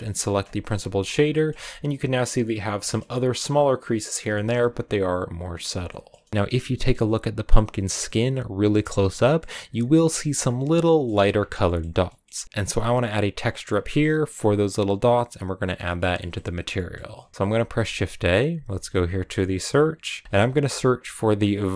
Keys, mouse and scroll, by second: 0.0 ctrl+shift+click, 1.1 shift+middle click, 1.3 shift+scroll up 3, 2.7-4.0 shift+middle drag, 4.0 scroll down 2, 4.2-5.8 shift+middle drag.